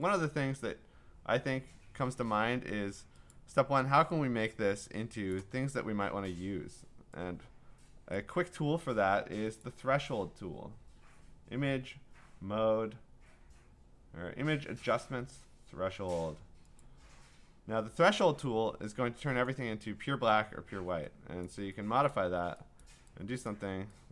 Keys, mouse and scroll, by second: 0.2 click, 2.6 Escape, 3.3 click, 5.3 click, 8.1 click, 9.7 click, 16.8 click, 19.5 click, 21.5 click, 22.1 click, 22.8 click, 23.5 click.